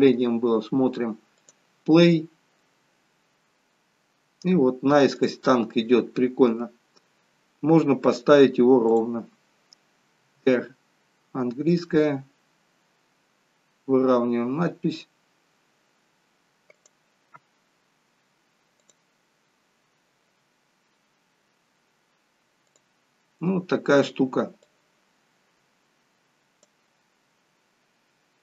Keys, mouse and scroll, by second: 1.5 click, 5.2 click, 8.9 click, 10.3 r, 18.9 click, 22.8 click, 24.7 click.